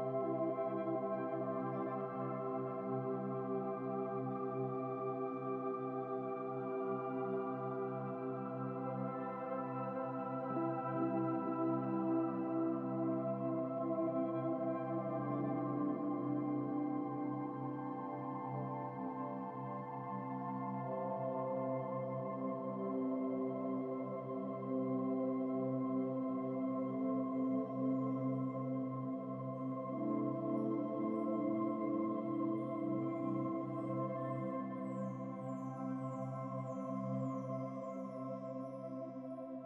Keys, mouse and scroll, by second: 1.7-2.2 scroll up 8, 2.2 Tab, 2.9 a, 3.9-4.2 scroll down 13, 4.9-6.4 right drag, 6.4 click, 6.8-8.7 right drag, 9.0-10.2 right drag, 10.2 u, 10.8-11.2 scroll up 9, 11.2-11.6 scroll down 2, 15.5 Tab, 18.8 scroll up 4, 19.8-21.0 shift+middle drag, 21.0 Tab, 21.7 a, 22.7 a, 23.6 scroll down 4, 24.0 a, 24.6 s, 26.1 click, 30.6 Tab, 30.7 scroll down 3, 31.4 scroll up 1, 31.6-32.7 middle drag, 32.7 shift+d, 33.7 click, 36.2 KP_Decimal, 36.6 scroll up 4, 36.9-38.0 middle drag, 38.0-38.4 scroll up 4, 38.4 scroll down 3, 38.6-39.6 middle drag.